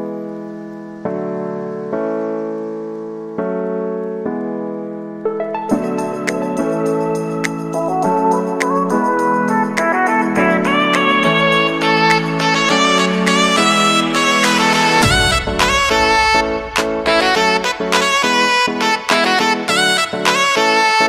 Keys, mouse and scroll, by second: 0.1 s, 0.7 click, 1.4-1.8 typing, 2.9 click, 6.1 Return, 7.2 click, 7.8 space, 9.2-9.6 typing, 10.1 click, 11.2 space, 14.3-21.0 drag.